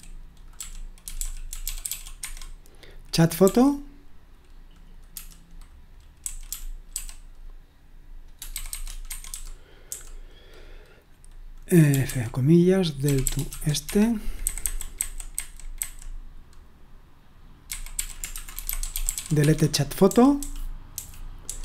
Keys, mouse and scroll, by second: 0.0-3.9 typing, 5.1-7.4 typing, 8.5-9.9 typing, 11.6-21.6 typing.